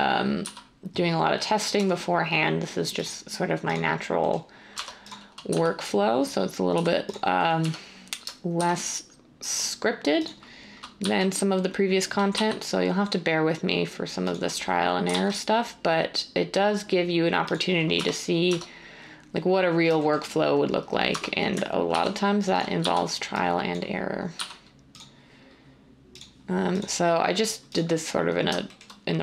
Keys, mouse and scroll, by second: 0.4 z, 1.7 Tab, 4.7 Tab, 5.5 z, 6.7 typing, 8.5 typing, 11.0 z, 12.3 s, 15.0-16.0 typing, 17.9 Tab, 18.4 Tab, 21.1 Tab, 21.9 ctrl+r, 23.5 z, 24.3 x.